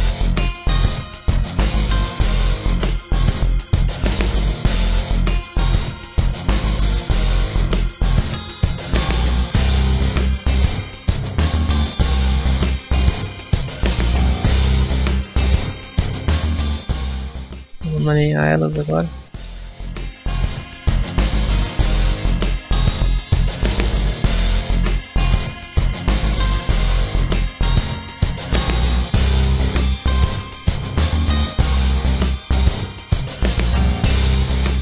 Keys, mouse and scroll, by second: 0.3 click, 0.5 ctrl+r, 1.7 click, 2.0 shift+middle click, 3.3 scroll down 3, 3.7 shift+middle click, 4.0 middle click, 4.6 shift+middle click, 5.0 middle click, 8.7 shift+middle click, 9.0 scroll up 1, 9.6 ctrl+r, 11.3 click, 11.5 middle click, 11.8 scroll up 1, 12.2 ctrl+r, 13.6 click, 13.9 shift+middle click, 14.3 middle click, 14.7 shift+middle click, 15.2 middle click, 15.8 shift+middle click, 16.1 middle click, 17.0 shift+middle click, 18.5 alt+right click, 19.2 alt+shift+right click, 19.6 s, 23.2 click, 24.3 shift+middle click, 25.0 alt+right click, 25.6 alt+shift+right click, 26.0 shift+middle click, 26.5 s, 30.1-30.9 scroll up 1, 30.9 click, 31.5 a, 31.7 shift+middle click, 32.5 alt+right click, 33.3 alt+shift+right click, 33.9 s.